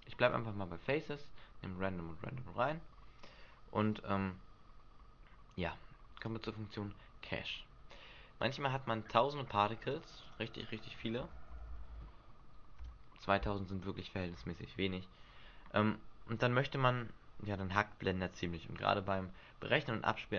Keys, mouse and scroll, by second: 0.2 click, 6.2 click, 9.8 click, 10.2 click.